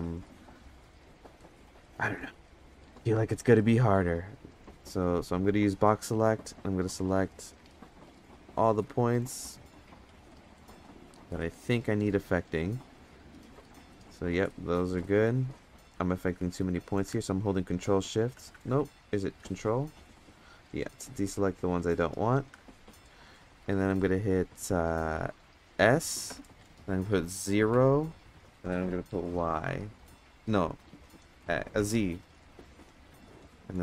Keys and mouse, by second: 0.4 click, 3.3 click, 5.5-7.9 drag, 8.4-8.8 middle drag, 9.7-11.4 shift+drag, 14.5 middle click, 15.0 middle click, 17.2-17.9 ctrl+shift+drag, 18.5 ctrl+z, 19.4-19.8 drag, 21.6 ctrl+click, 23.6 middle drag, 25.8 s.